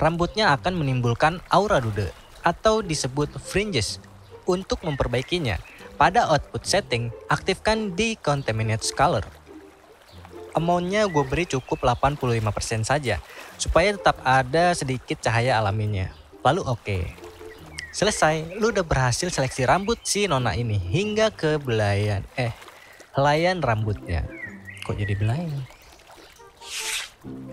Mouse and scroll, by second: 18.6 click, 19.5-20.7 drag.